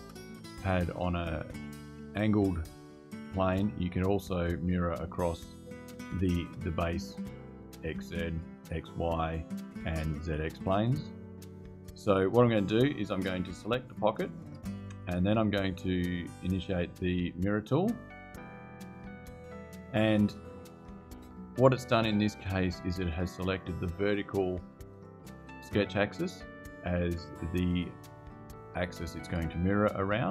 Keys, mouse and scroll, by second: 13.7 click, 18.1 click.